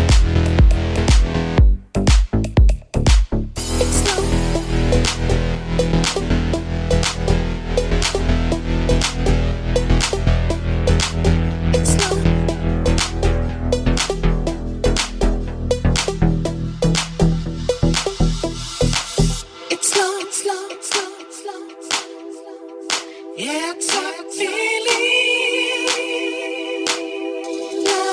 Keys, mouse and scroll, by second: 5.8 g, 16.0-28.1 shift+drag, 16.3 shift+d, 18.8 g, 23.5 g, 24.1 r, 26.8 KP_3, 27.7 r.